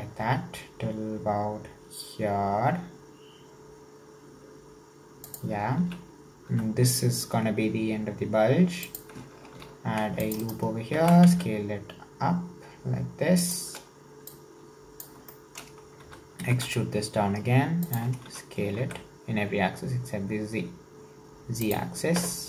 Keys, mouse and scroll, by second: 5.8 e, 9.6 ctrl+r, 10.9 s, 14.3 click, 15.3 shift+middle click, 16.0 e.